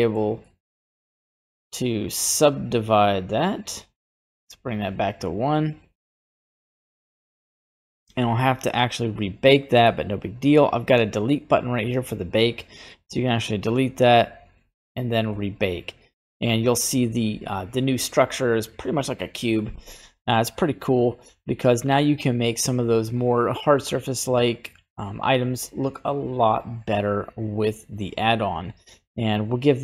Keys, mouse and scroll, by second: 0.4 middle click, 1.8-4.5 drag, 5.6 click, 11.3-29.8 drag.